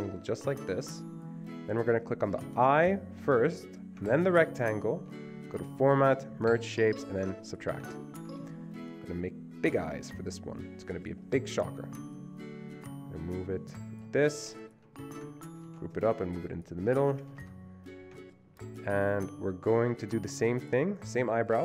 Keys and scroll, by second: 15.7 ctrl+g, 17.3 Escape, 17.4 Escape.